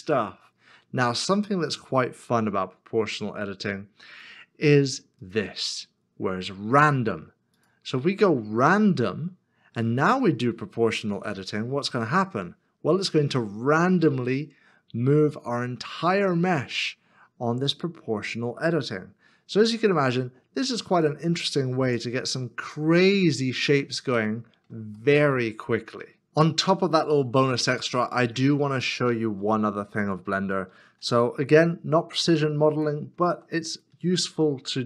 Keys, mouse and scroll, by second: 11.2 g, 13.1 z, 15.9 scroll down 1, 16.6-18.6 scroll up 1, 18.6 scroll down 1, 21.9 Tab, 22.8 middle click, 24.2 shift+middle click, 26.1 shift+middle click, 27.1 Delete, 27.3 middle click, 28.0 shift+middle click, 28.3 shift+scroll down 2, 31.0 shift+d.